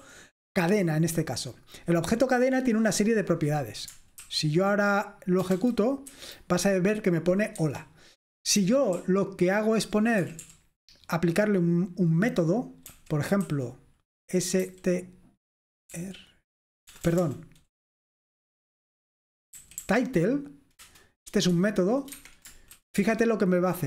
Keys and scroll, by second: 0.0 k, 4.2 shift+:, 6.1 F5, 7.6 Escape, 8.6-10.2 typing, 11.9 typing, 13.0-14.6 typing, 17.1 BackSpace, 17.2 BackSpace, 19.4-20.3 typing, 20.8 Return, 21.6 shift+9, 22.2 Escape, 22.8-23.5 typing.